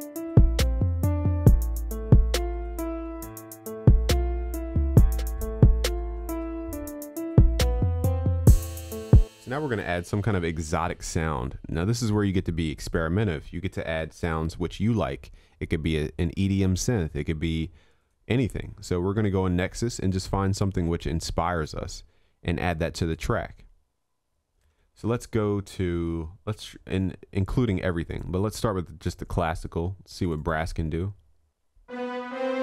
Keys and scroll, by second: 3.3 ctrl+s, 9.9 ctrl+s, 14.0 ctrl+s.